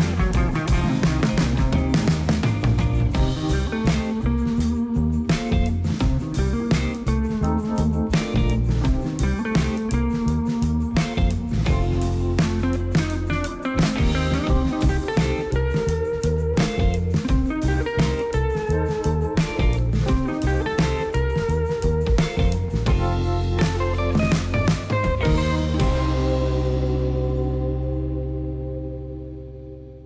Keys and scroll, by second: 3.2 Tab, 9.8 shift+s, 10.9 Tab, 11.8 shift+a, 15.8 g, 16.2 y, 18.6 Tab, 20.4 g, 20.7 z, 22.1 shift+s, 23.6 Tab, 24.0 shift+a, 27.1 Tab, 27.8 s, 28.2 shift+z, 29.4 Tab.